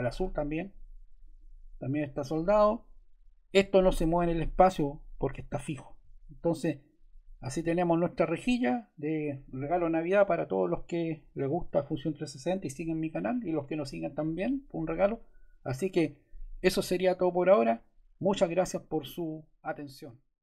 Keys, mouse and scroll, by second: 6.7 click.